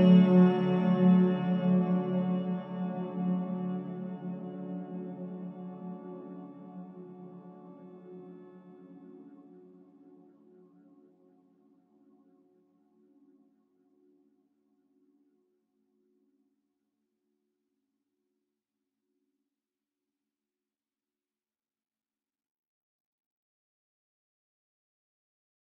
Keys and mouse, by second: 1.1-2.1 middle drag, 2.7-3.2 middle drag, 4.9 middle click, 6.2 click, 7.8-8.6 drag, 12.9 middle click, 14.2 ctrl+KP_Add, 14.8 ctrl+KP_Add, 22.1 middle click, 23.1 ctrl+KP_Add, 23.6 ctrl+KP_Add.